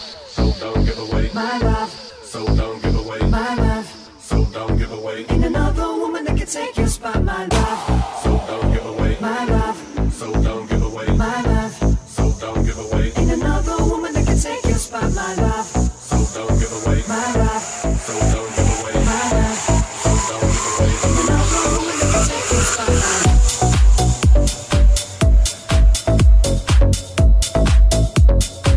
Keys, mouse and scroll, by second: 0.2 right click, 0.3-2.6 middle drag, 2.6 right click, 2.7-4.1 middle drag, 3.7 g, 4.1 right click, 4.2-15.8 middle drag, 4.4 g, 5.6 ctrl+z, 7.1 /, 7.8 Tab, 13.0 right click, 15.0-19.4 ctrl+drag, 15.0 right click, 20.3-22.1 drag, 22.3-28.7 drag.